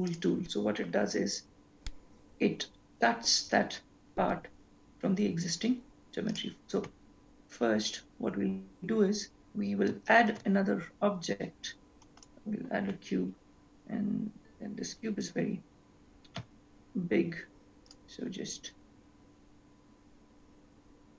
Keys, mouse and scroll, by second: 0.2 click, 6.5 click, 10.2-10.5 scroll, 10.5 shift+a, 14.8 scroll down 10, 15.5-16.9 scroll down 1, 16.9 s, 18.8-20.0 scroll up 4, 20.6 scroll down 1.